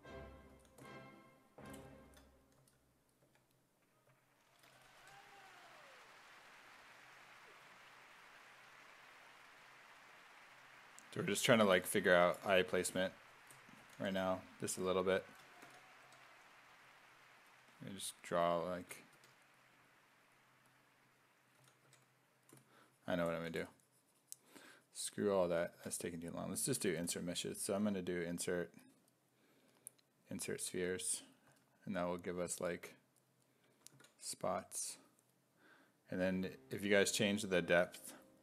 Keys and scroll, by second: 0.5 s, 2.6 s, 3.3 1, 4.6-5.5 typing, 12.7 s, 13.8 s, 14.1 1, 15.7 s, 16.1 1, 19.2 1, 21.6 s, 21.9 1, 23.4 s, 25.5 s, 25.8 4, 26.7 b, 27.0 i, 31.5 s, 34.0 ctrl+z.